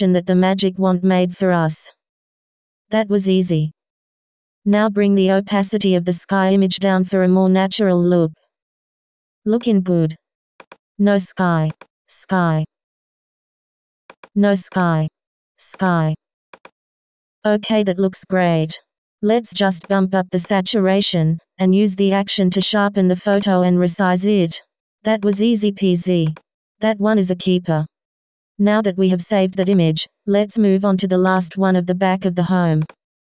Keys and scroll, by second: 26.8 Return.